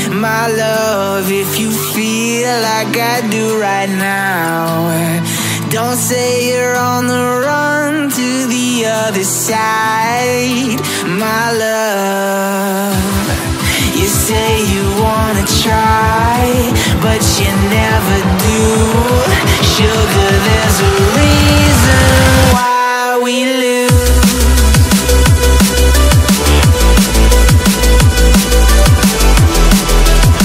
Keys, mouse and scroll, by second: 4.1 ctrl+t, 9.0 Right, 9.1-10.7 typing, 10.3 Caps_Lock, 19.5-20.9 typing, 20.4 Caps_Lock, 25.8 ctrl+t, 29.1 alt+scroll down 1, 29.3 alt+scroll up 1.